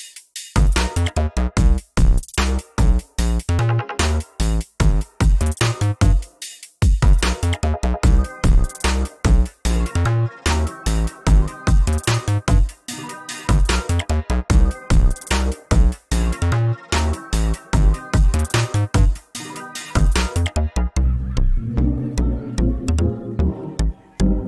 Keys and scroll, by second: 2.0 ctrl+space, 3.7 ctrl+space, 6.6 ctrl+z, 7.0 ctrl+space, 9.6 ctrl+space, 14.1 ctrl+space.